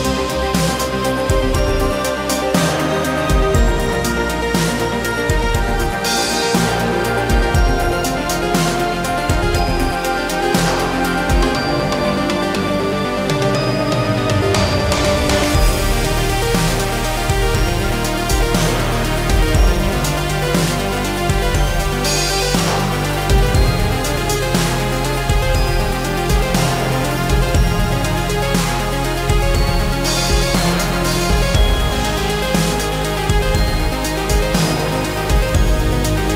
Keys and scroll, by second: 10.4 Left, 11.0 Right, 15.8 space, 18.0 shift+x, 25.4 shift+s, 31.9 space.